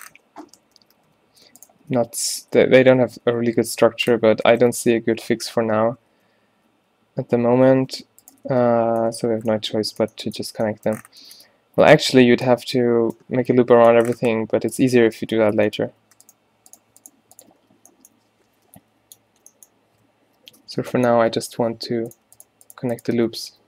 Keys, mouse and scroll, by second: 0.6 ctrl+z, 0.8 ctrl+z, 1.0 ctrl+z, 2.0-3.7 typing, 4.6 ctrl+z, 4.8 ctrl+z, 5.0 ctrl+z, 5.3 ctrl+z, 5.5 ctrl+z, 6.8 f, 7.8 ctrl+z, 8.6 f, 9.4 a, 14.8 middle click, 17.7 f, 18.5 a, 18.8 b, 19.4 z, 20.4-21.5 typing, 23.2 f.